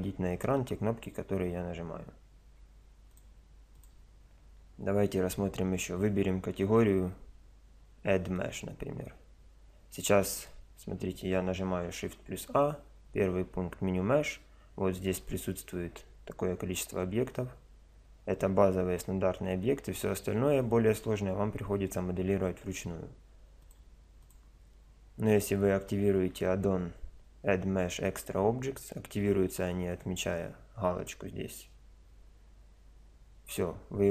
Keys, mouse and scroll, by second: 2.5 n, 11.6 shift+a, 32.0-34.1 middle drag.